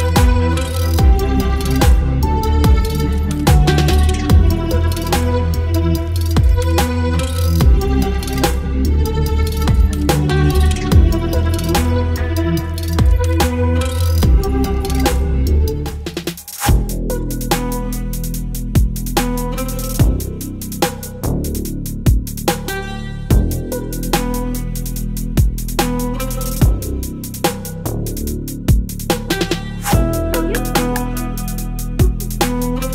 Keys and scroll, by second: 0.5 Delete, 1.4 Delete, 1.9 space, 2.2 v, 2.8 ctrl+t, 3.4 Return, 3.6 space, 4.5 space, 4.9 ctrl+t, 5.2 Return, 5.8 space, 7.8 Delete, 8.3 Right, 8.5 space, 9.8 alt+space, 11.1 space, 11.8 alt+space, 12.1 Down, 14.1 ctrl+t, 14.9 Return, 15.3 Delete, 15.6 space, 16.6 v, 18.3 space, 20.7 Delete, 21.2 v, 22.1 Delete, 22.4 v, 24.0 space, 25.5 space, 26.6 space, 28.1 Up, 28.2 Right, 28.4 Down, 31.3 space.